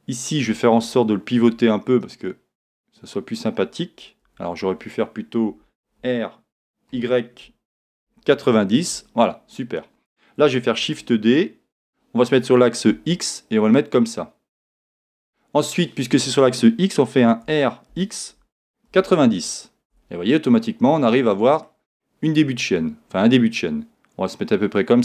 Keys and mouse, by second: 1.4 r, 6.0 r, 10.8 shift+d, 15.0 click, 17.4 r, 21.0-23.5 middle drag, 23.5 click.